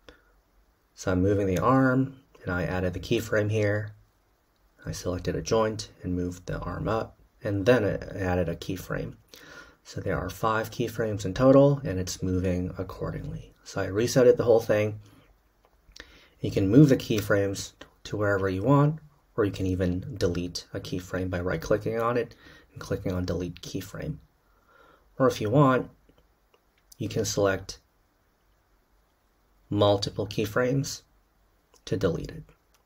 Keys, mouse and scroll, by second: 12.7-18.2 drag, 18.2 Delete.